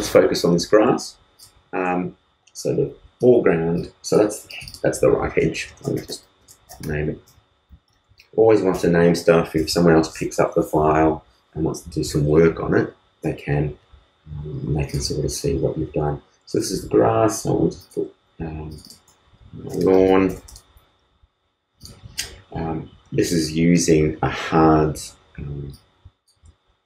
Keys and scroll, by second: 5.4-6.7 typing, 9.2 super+Return, 9.5 super+s, 19.4-20.2 typing.